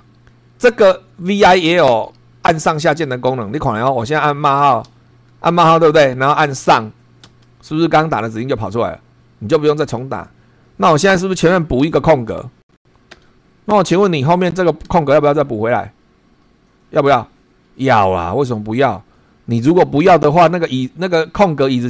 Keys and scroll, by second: 4.9 shift+;, 7.2 Up, 10.6 Left, 11.8 Right, 12.5 Right, 13.1 space, 14.2 Right.